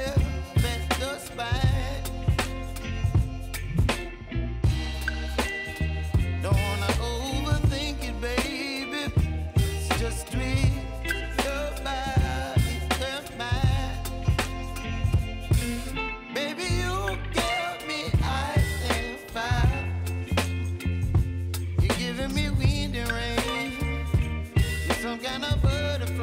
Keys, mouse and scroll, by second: 1.7 space, 3.3 click, 3.6 right click, 6.1-15.3 drag, 15.3 scroll down 1, 16.1-21.3 drag, 22.8-23.6 scroll up 1, 25.0 click.